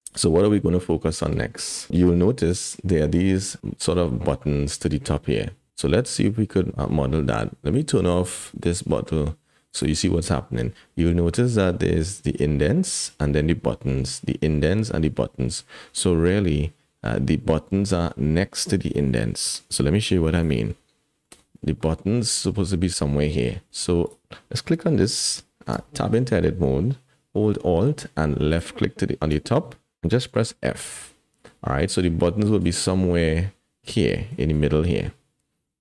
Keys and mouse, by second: 1.1 shift+click, 2.1 KP_1, 9.7 click, 20.4 click, 21.2-21.5 middle drag, 21.8 middle click, 22.5 middle click, 24.9 click, 25.7 Tab, 28.5 alt+click, 30.3 f, 31.4 click, 35.7 click.